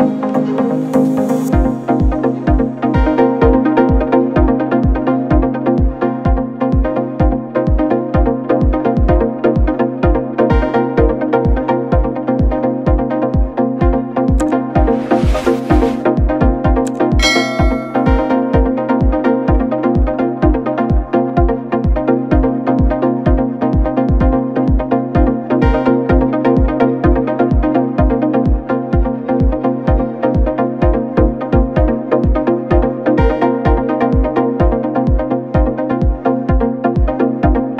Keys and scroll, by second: 16.5 Return, 23.6 b.